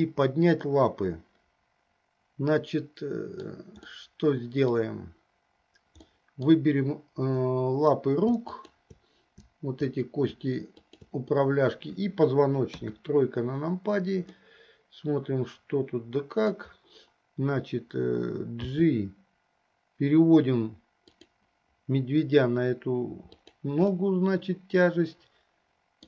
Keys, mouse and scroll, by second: 0.2-3.8 middle drag, 4.1 middle click, 6.2-6.8 middle drag, 8.8 shift+click, 12.9 KP_3, 14.7-16.9 middle drag, 18.6 g, 23.3 click, 24.1-26.0 middle drag.